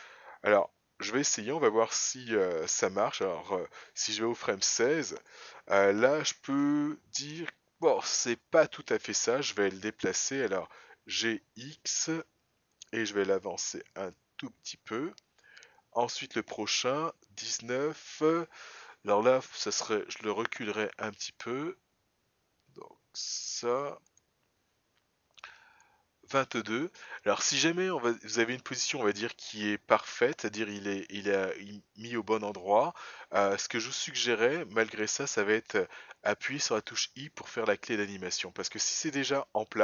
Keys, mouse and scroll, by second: 4.2 click, 11.1 g, 16.1 click, 20.1 g, 25.8 click, 29.2 g.